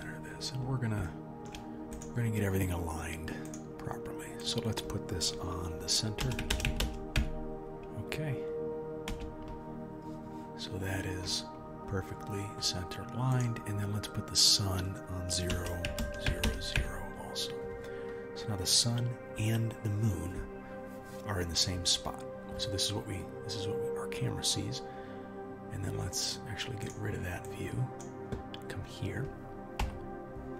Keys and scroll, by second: 29.8 KP_1.